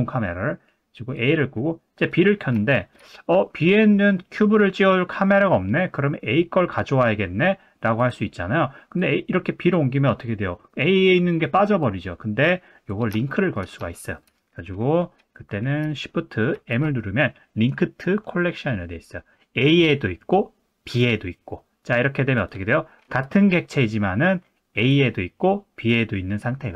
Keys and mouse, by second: 1.1 click, 2.0 click, 2.7 shift+middle drag, 8.0 click, 9.0 click, 13.3 shift+middle drag, 13.9 shift+middle drag, 16.5 shift+m, 22.4 click, 24.8 click, 25.9 click.